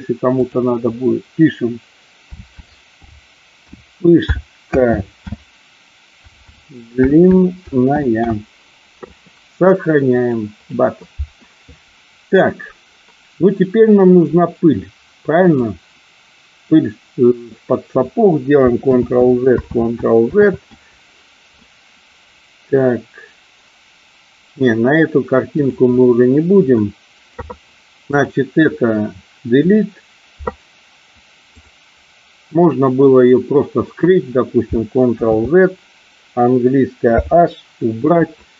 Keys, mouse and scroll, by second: 15.4 click, 18.9 ctrl+z, 19.8 ctrl+z, 20.2 ctrl+z, 26.5 Delete, 28.1 click, 29.5 Delete, 31.5 click, 35.1 ctrl+z, 37.0 h.